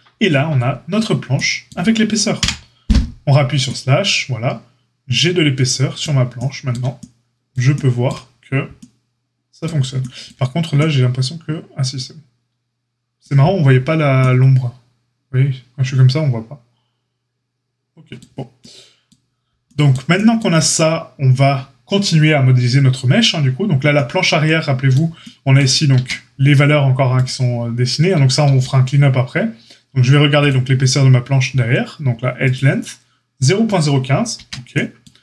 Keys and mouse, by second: 2.3 KP_Divide, 19.6-20.2 shift+middle drag, 25.9 Tab, 27.2-30.4 middle drag, 28.5 q, 30.4-35.2 drag, 34.3 Tab.